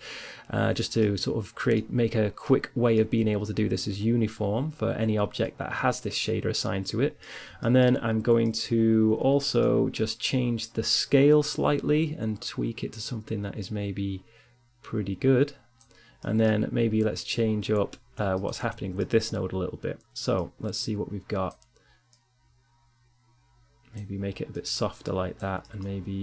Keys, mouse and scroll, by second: 1.4-3.7 middle drag, 4.2-6.4 drag, 9.8-11.9 drag, 15.3-16.4 middle drag, 16.4-18.4 drag, 17.2-18.8 middle drag, 18.8 click, 19.2 middle click, 19.6-22.9 drag, 23.5-24.6 drag, 24.6-26.1 middle drag, 26.1 click.